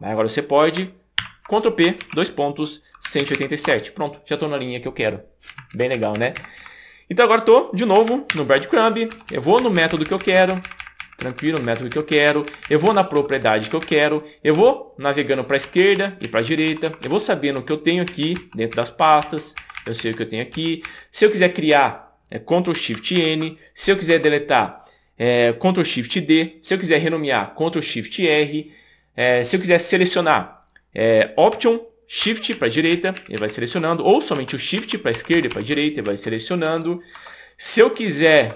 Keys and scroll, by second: 1.2 super+p, 2.0-3.9 typing, 5.5 Up, 5.9 Up, 5.9 Up, 6.1 Up, 6.4 Up, 6.6 Up, 8.4 shift+super+., 9.2 Down, 9.3 Down, 9.6 Up, 9.8 Up, 9.9 Up, 10.1 Up, 10.3 Up, 10.4 Up, 10.5 Up, 10.7 Up, 10.8 Up, 11.0 Up, 11.2 Up, 11.4 Up, 11.6 Up, 11.8 Up, 11.9 Up, 12.1 Up, 12.3 Up, 12.5 Up, 13.2 Down, 13.3 Down, 13.6 Up, 13.8 Up, 15.3 alt+Left, 16.3 alt+Right, 16.7 alt+Left, 17.5 Down, 18.1 Right, 18.3 Down, 18.7 Up, 19.2 Right, 19.6 Up, 19.8 Up, 20.0 Right, 20.5 Down, 20.8 Up, 21.7 Escape, 23.2 shift+super+n, 24.1 Escape, 32.6 alt+shift+Right, 34.4 shift+Left, 36.1 Right, 36.6 Escape, 38.3 Left.